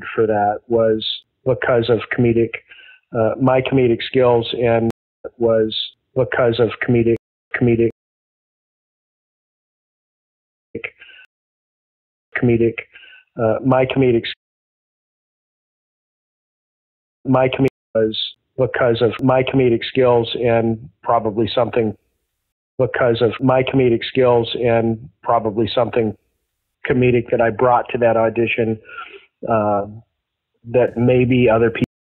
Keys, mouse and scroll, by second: 4.8 space, 5.1 click, 5.1 space, 7.1 space, 7.3 click, 7.4 space, 7.8 click, 9.6 click, 9.7 click, 10.7 space, 11.2 space, 12.1 click, 12.2 space, 12.7-16.0 drag, 14.2 space, 16.7 ctrl+shift+Delete, 17.2 space, 17.6 space, 17.8 click, 17.8 space, 19.9 click, 21.0-22.3 drag, 22.4 space, 22.7 click, 22.8 space, 24.3 ctrl+s, 25.3 click, 25.9 click, 27.0-28.6 drag, 28.9 click, 30.7-31.7 drag, 31.7 space.